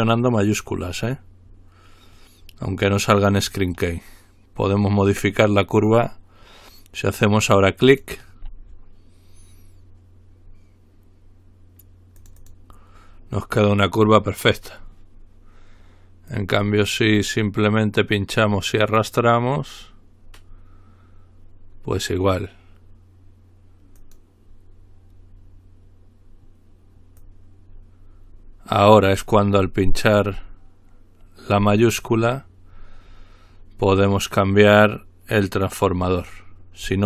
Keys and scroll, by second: 29.9-30.3 typing, 33.0 typing.